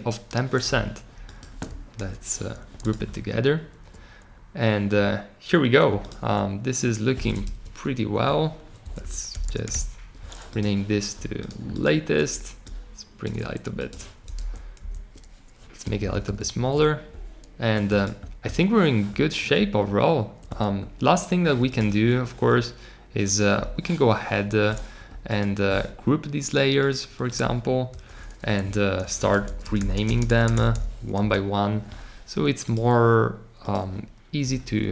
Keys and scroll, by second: 1.9 super+g, 8.7-10.1 typing, 27.8 super+g, 28.9 super+r, 29.1-30.4 typing.